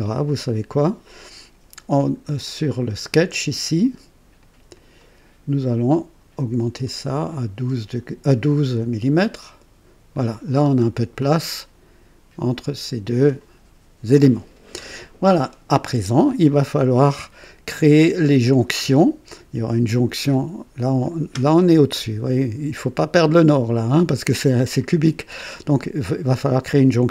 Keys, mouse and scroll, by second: 1.9 click, 2.7 click, 4.3 click, 6.3-6.9 scroll up 2, 6.6 typing, 7.3 scroll down 1, 8.4 click, 8.8-9.7 typing, 9.4 click, 10.1 click, 10.5-10.9 scroll down 1, 11.2-13.5 drag, 16.4-17.4 drag, 18.4-19.3 drag, 24.8-25.5 drag.